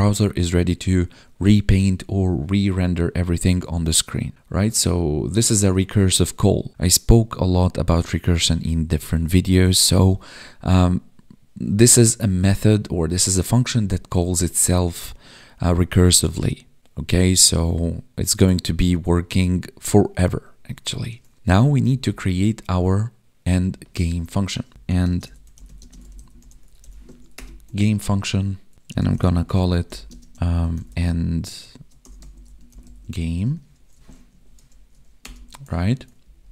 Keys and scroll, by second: 21.6 Down, 24.0 Up, 25.0 space, 25.7 space, 27.1 ctrl+s, 28.0 ctrl+s, 30.0 space, 34.3 Right, 35.8 ctrl+s, 36.2 ctrl+Down.